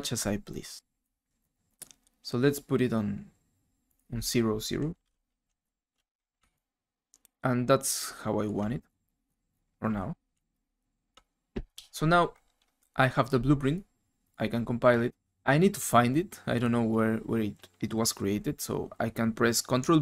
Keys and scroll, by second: 1.5 w, 5.0 0, 5.0 Tab, 5.3 Tab, 5.3 0, 5.9 f.